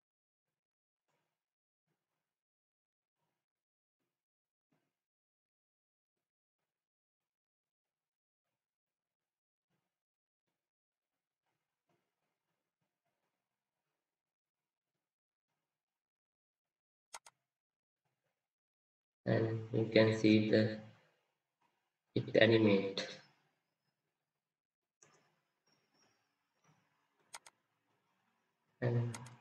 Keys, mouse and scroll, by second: 18.5 scroll up 1, 18.5 scroll down 1, 19.1 scroll up 1, 19.2 scroll down 1.